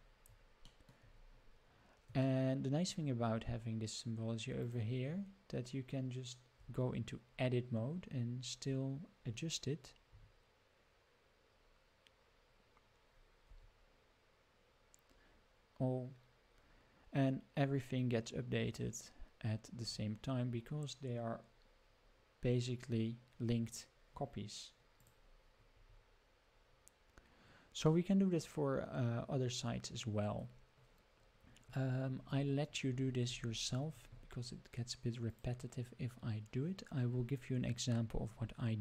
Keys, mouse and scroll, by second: 0.0 scroll down 3, 0.7 shift+middle drag, 1.1 scroll up 3, 2.2-2.9 shift+middle drag, 3.2 scroll up 2, 3.8 scroll down 2, 4.6 click, 6.6 Tab, 7.3-7.6 scroll up 3, 7.7-8.9 scroll down 4, 10.1 g, 25.8 Tab, 26.2-26.5 scroll up 1, 26.5 scroll down 1, 27.9-30.4 middle drag, 31.2-34.8 scroll up 84, 35.3 click.